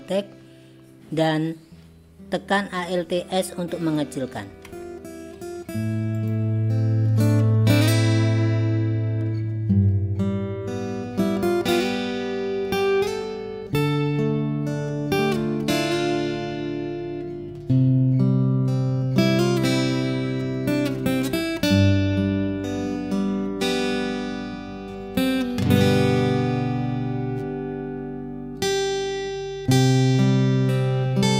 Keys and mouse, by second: 4.7 alt+s, 7.6 click, 8.7 g, 9.8 click, 9.9 g, 11.1 click, 12.1 alt+s, 14.2 click, 15.2 click, 15.8 alt+s, 18.9 alt+s, 20.5 click, 20.9 click, 21.4 g, 22.7 click, 23.3 alt+s, 25.3 alt+s, 26.5 click, 27.1 g, 29.0 click, 29.4 g.